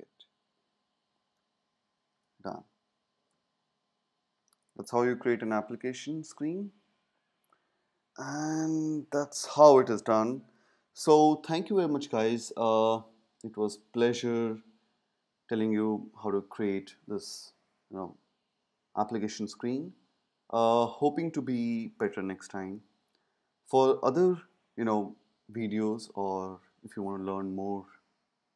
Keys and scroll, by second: 1.4 space.